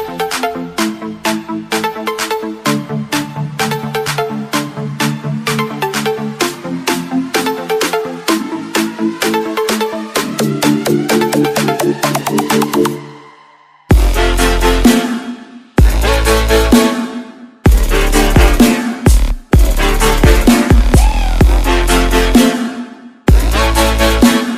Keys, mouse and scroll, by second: 1.7 click, 5.4-5.8 scroll down 1, 5.8-6.1 scroll up 1, 6.4 scroll down 1, 6.7 scroll up 1, 7.1 click, 14.3 click, 16.0-16.8 scroll up 1, 16.8 click, 18.5 Delete, 19.3 click, 20.3 Delete, 21.3 click.